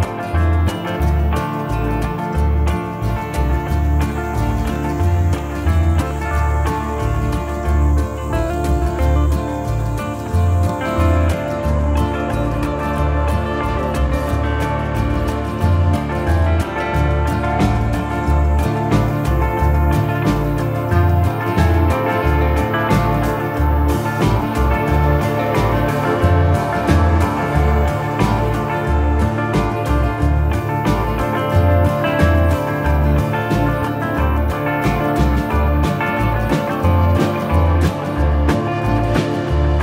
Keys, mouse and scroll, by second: 1.7 click, 4.6 click, 5.7 click, 7.1 click, 9.0 middle click, 10.4 click, 12.3 click, 13.5 click, 14.5 s, 14.9 BackSpace, 15.7 shift+r, 16.9 BackSpace, 17.0 s, 18.9 click, 19.0 s, 19.7 Return, 20.5 middle click, 20.9 click, 21.9 click, 23.9 click, 26.0 middle click, 27.1 middle click, 27.7 middle click, 31.3 click, 32.0 middle click, 32.8 click, 33.3 middle click, 33.9 middle click, 34.6 middle click, 35.0 click, 36.9 click, 37.0 middle click, 37.9 middle click, 38.8 middle click, 39.5 middle click.